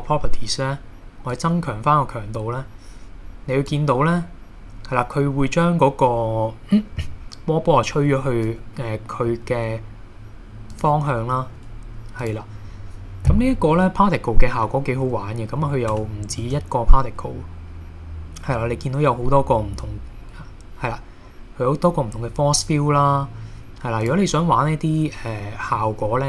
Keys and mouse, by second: 1.3-3.7 drag, 9.3 r, 10.7 click, 11.4 g, 12.2 click, 16.0 space, 16.4 shift+a, 24.0 click, 25.8-26.2 middle drag.